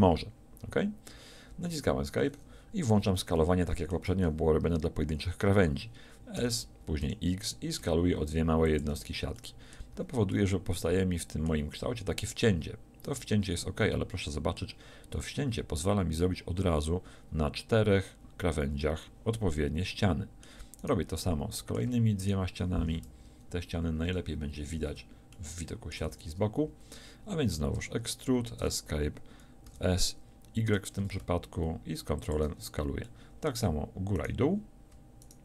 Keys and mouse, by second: 6.4 s, 10.4 z, 20.8-23.3 drag, 23.3 KP_1, 24.1 KP_3, 26.1 z, 27.7 e, 29.7 s.